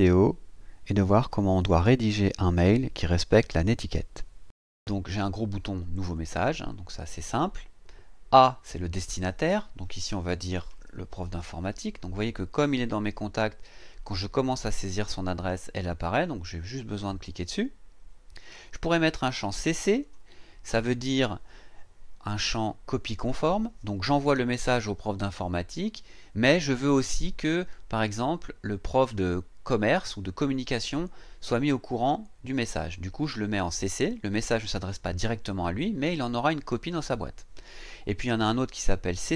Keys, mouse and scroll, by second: 6.1 click, 10.4-11.9 typing, 16.9 click, 20.0 click.